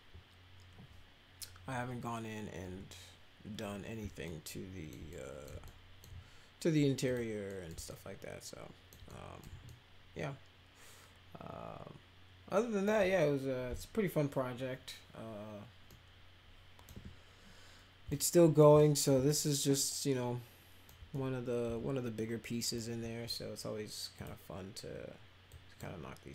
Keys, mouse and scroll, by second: 2.6 p, 4.2 alt+middle click, 5.1 middle click, 5.6 alt+middle click, 7.0 click, 7.4 middle click, 7.8-8.9 alt+middle drag, 9.1 middle click, 9.6-12.8 alt+middle drag, 15.8 middle click, 18.1 alt+middle click, 18.7 middle click, 19.2-20.8 alt+middle drag, 21.1-22.8 middle drag, 24.1 click, 25.5 drag.